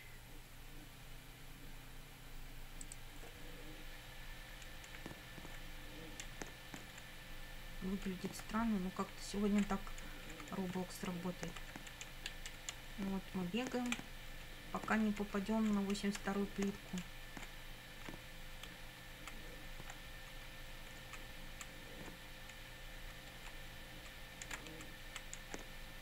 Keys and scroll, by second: 4.9 Up, 8.1 Up, 8.6 Right, 9.5 Up, 10.0 Left, 10.6 Up, 12.1 Down, 12.7 Up, 14.0 Left, 14.4 Up, 15.0 Left, 15.3 Up, 16.0 Left, 16.2 Up, 16.8 Left, 17.0 Up, 18.7 Left, 19.7 Up, 20.1 Left, 21.8 Up, 22.6 Left, 23.4 Up, 23.7 Left, 24.5 Up, 24.7 Left, 25.4 Up.